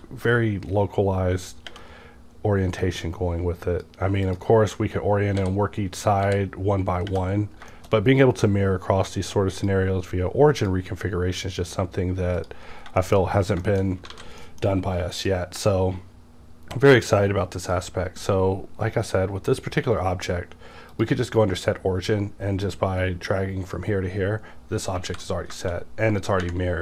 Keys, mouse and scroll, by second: 2.8-5.4 drag, 5.4 w, 6.2 w, 7.7 middle click, 7.8 scroll, 7.9 scroll down 1, 9.1-12.4 drag, 12.7 scroll down 1, 13.0 shift+middle click, 13.3-13.9 scroll down 2, 13.6 shift+middle click, 14.1 alt+a, 14.4 middle click, 14.7-15.2 scroll up 1, 15.2 click, 17.6 click, 18.8 scroll up 1, 19.7 scroll up 1, 19.7 q, 20.9 click, 22.6-26.8 drag, 25.1 alt+x.